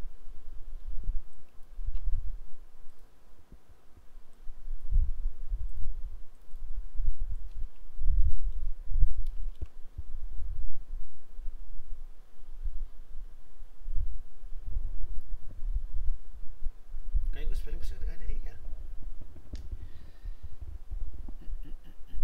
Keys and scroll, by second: 1.9 ctrl+c, 7.7 alt+Tab, 9.5 ctrl+v.